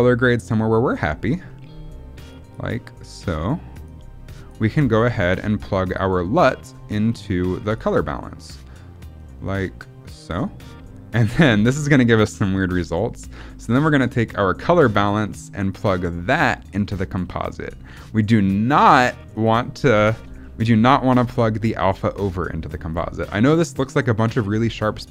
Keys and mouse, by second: 1.4 middle click, 2.2 click, 2.9 click, 3.8 click, 5.1 middle click, 5.9 click, 7.7-10.2 drag, 12.9 middle click, 13.8 middle click, 14.8 middle click, 15.6-17.2 drag, 18.2-19.4 drag, 20.4 middle click, 21.2-22.6 drag.